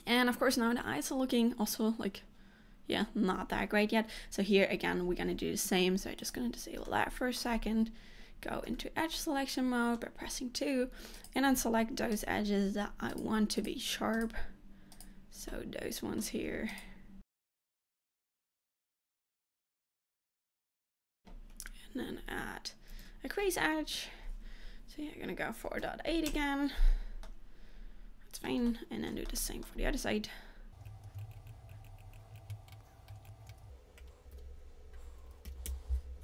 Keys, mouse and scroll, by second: 6.3 click, 7.0 shift+middle click, 7.6 scroll up 2, 8.7 2, 9.2 middle click, 10.5 scroll up 1, 11.3 click, 12.2 shift+click, 13.2 shift+click, 13.7 click, 14.2 shift+click, 15.0 shift+click, 15.6 middle click, 16.7 shift+click, 17.2 shift+click, 17.5 shift+click, 17.8 shift+click, 17.9 shift+middle click, 18.1 middle click, 18.4 click, 18.6 shift+click, 18.7 click, 18.9 click, 19.0 shift+click, 19.2 shift+click, 19.4 middle click, 19.6 alt+shift+click, 19.9 shift+click, 20.0 shift+click, 20.1 shift+click, 20.4 shift+click, 20.5 shift+middle click, 20.6 middle click, 20.9 shift+click, 21.0 scroll down 2, 23.0 shift+e, 27.4 middle click, 28.8 shift+middle click, 29.4 middle click, 29.9-30.3 scroll up 2, 30.9 alt+click, 31.3 shift+click, 31.5 shift+click, 31.7 shift+click, 31.9 shift+click, 32.0 shift+click, 32.4 shift+click, 32.5 shift+scroll up 1, 32.5 shift+middle click, 33.3 shift+click, 33.5 middle click, 34.4 shift+e, 36.1 scroll down 1.